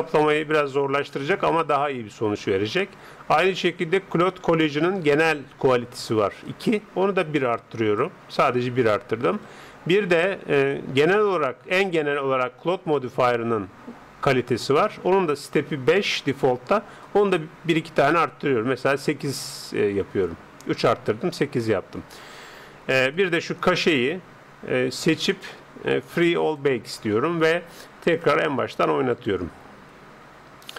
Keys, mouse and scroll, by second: 6.5-8.2 drag, 17.1-18.8 drag, 23.1-24.9 drag, 26.6-30.7 drag.